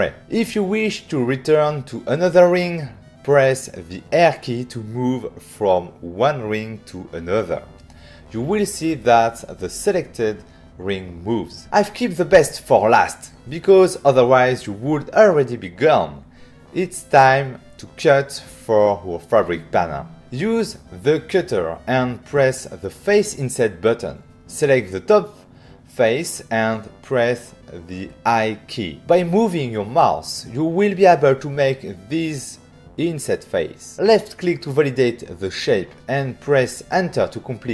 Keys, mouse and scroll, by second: 0.3 click, 3.2 c, 5.3 click, 6.0 click, 6.6 click, 7.9 click, 9.6 click, 10.7 click, 20.2 middle click, 20.3 click, 20.6 f, 22.6 click, 25.3 click, 26.6 click, 26.7 click, 28.5 i, 33.8 click, 35.4 Return.